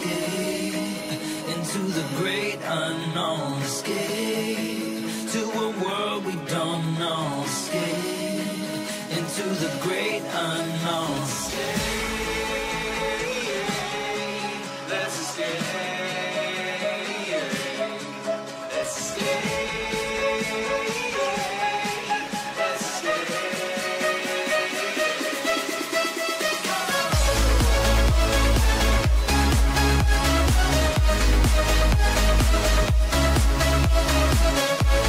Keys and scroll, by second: 2.6 h.